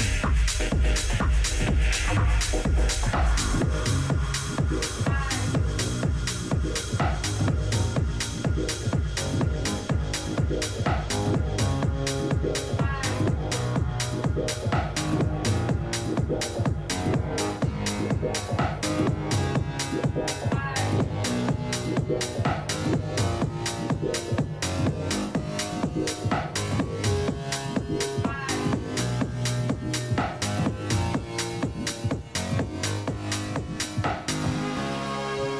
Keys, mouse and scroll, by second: 13.8-18.5 middle drag, 22.2-24.6 middle drag, 24.6 a, 25.0 a, 25.4 a, 25.6 a, 29.4-30.7 right drag, 30.7 middle click, 32.1 middle click, 32.1-33.7 right drag, 32.6-34.4 middle drag.